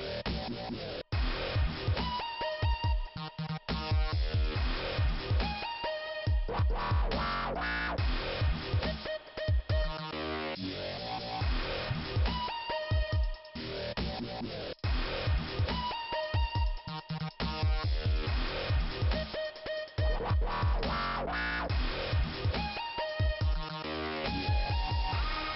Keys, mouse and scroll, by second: 8.9 click, 9.7 click, 9.8 click, 9.9 double click, 11.7 scroll down 1, 12.4 middle click, 14.0 click, 14.1 click, 14.3 double click, 18.8 click, 18.9 click, 20.3 click, 21.3 click, 21.3 click, 21.9-22.9 scroll down 2, 22.9-24.0 scroll up 2, 24.7 click, 24.7-25.5 scroll down 3.